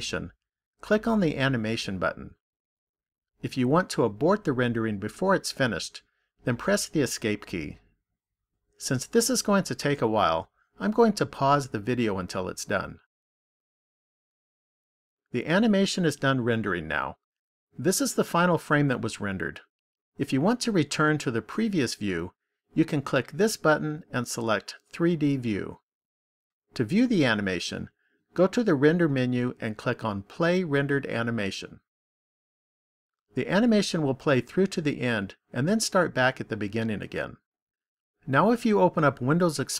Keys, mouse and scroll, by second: 2.8 click, 25.7 click, 29.7 click.